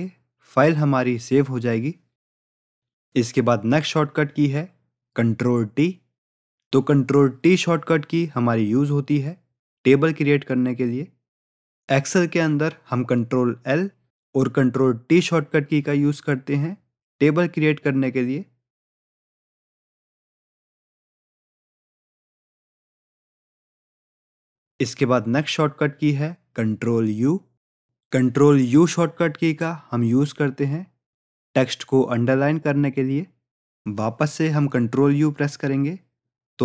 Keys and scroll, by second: 20.7 ctrl+t, 32.4 ctrl+u.